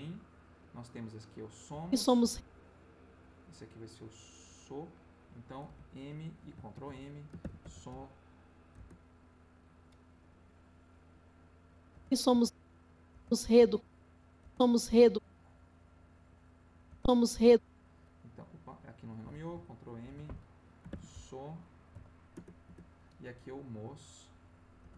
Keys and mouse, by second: 1.7 space, 3.1-5.0 drag, 5.6 m, 6.7 ctrl+m, 7.4 shift+s, 7.6 shift+o, 7.9 shift+m, 8.7 Return, 11.2 click, 11.9 space, 13.1 space, 13.8 click, 14.4 space, 15.3-16.8 drag, 16.9 space, 18.7 click, 20.0 ctrl+m, 20.9 shift+s, 21.9 o, 22.3 Return, 24.3 click, 24.8 space.